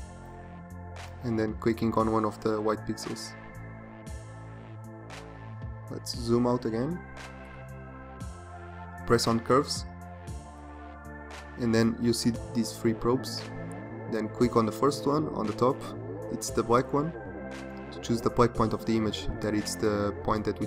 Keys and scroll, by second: 6.3 ctrl+0.